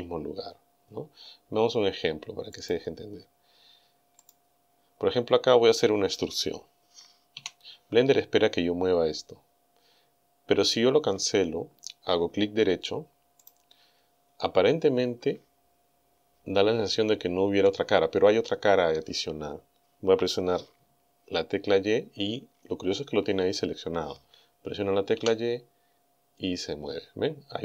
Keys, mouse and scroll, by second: 2.6 click, 4.3 right click, 7.4 e, 13.5 right click, 25.2 g.